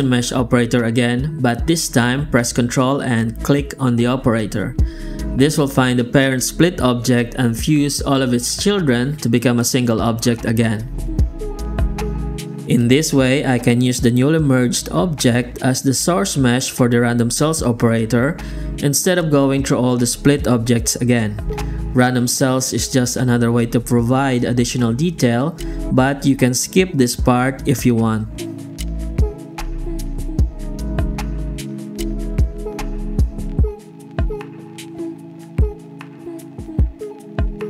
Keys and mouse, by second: 0.7 shift+q, 5.3 shift+z, 5.7 g, 6.3 Tab, 6.9 shift+z, 7.0 shift+z, 7.2 a, 7.7 alt+shift+z, 8.3 Tab, 8.5 shift+z, 9.3 alt+shift+z, 10.5 shift+q, 29.0 click, 29.5 F9, 32.6 KP_0, 34.3 z, 34.9 alt+shift+z, 35.1 alt+shift+z, 35.5 click, 35.8 alt+shift+z, 36.0 alt+shift+z, 37.2 F9.